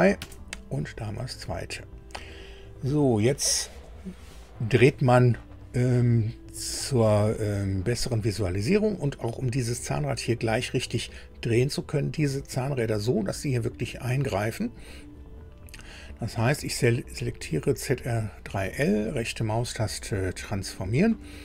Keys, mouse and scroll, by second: 0.2 KP_Enter, 1.5-1.9 scroll up 1, 2.1 scroll up 1, 17.2 click, 19.1 right click, 20.2 click.